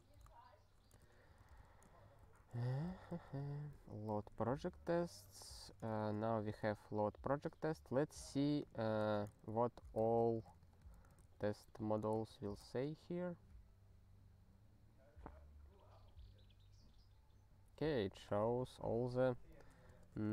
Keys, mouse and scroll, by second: 1.0 ctrl+s, 1.0-2.1 typing, 2.2 Return, 2.4 ctrl+a, 2.6 ctrl+k, 2.9 ctrl+k, 3.4 ctrl+p, 3.7 ctrl+k, 4.1 ctrl+s, 5.2 ctrl+p, 5.6 ctrl+alt+t, 6.0 ctrl+s, 6.8-7.4 scroll up 1, 8.6 click, 8.7 click, 9.0 ctrl+e, 9.5 Return, 9.8-12.3 typing, 19.9 ctrl+space, 19.9 ctrl+a.